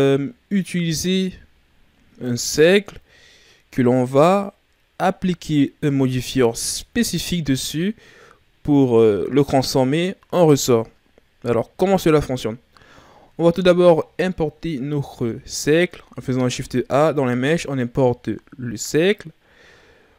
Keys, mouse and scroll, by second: 15.0 shift+a.